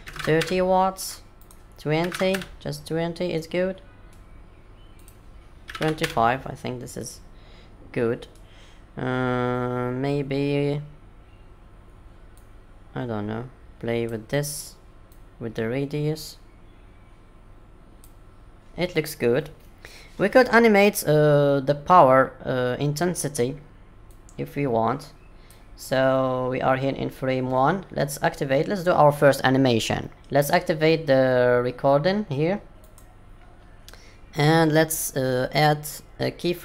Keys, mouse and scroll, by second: 1.3 click, 3.3 middle click, 4.9 click, 6.9 middle click, 12.3 click, 16.3 click, 18.5 middle click, 24.1 click, 32.8 click.